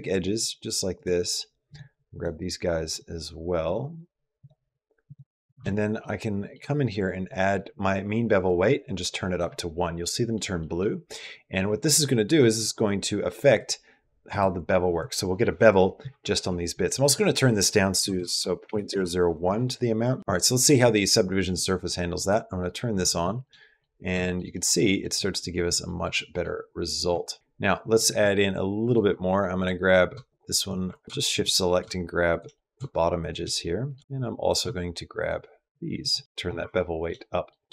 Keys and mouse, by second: 0.2 shift+click, 1.5 shift+click, 1.9 shift+click, 5.8 middle click, 8.4 click, 9.8 middle click, 10.5 middle click, 13.4 click, 16.9-18.7 drag, 18.1 KP_0, 20.0 middle click, 22.0 click, 23.2 shift+middle click, 23.4 middle click, 24.0 shift+middle click, 24.5 middle click, 25.6 middle click, 26.9 Tab, 27.3 middle click, 27.4 Tab, 30.1 shift+click, 30.6-31.5 typing, 30.7 alt+click, 31.4 middle click, 32.3 shift+middle click, 33.0 shift+click, 33.5 middle click, 36.1 middle click, 36.6 shift+middle click, 37.2 middle click.